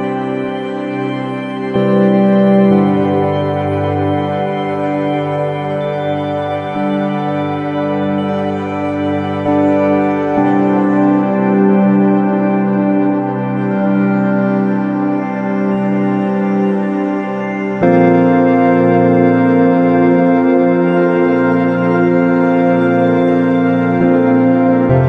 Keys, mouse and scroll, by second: 0.6 KP_3, 2.3-4.2 drag, 10.1 KP_0, 11.9 shift+z, 20.1-21.8 drag, 21.8 KP_0.